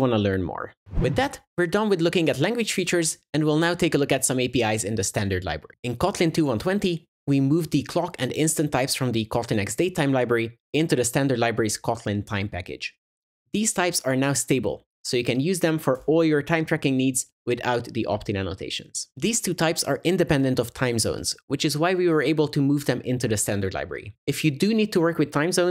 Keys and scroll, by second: 16.0 super+BackSpace, 16.0 ctrl+y.